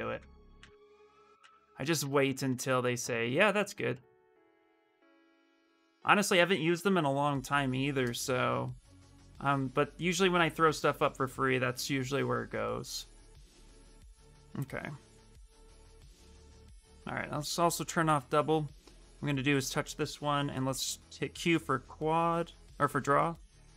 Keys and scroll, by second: 0.3 alt+Tab, 1.1 alt+Tab, 1.3 alt+Tab, 1.7 alt+Tab, 1.9 alt+Tab, 2.2 alt+Tab, 17.8 x, 20.2 q.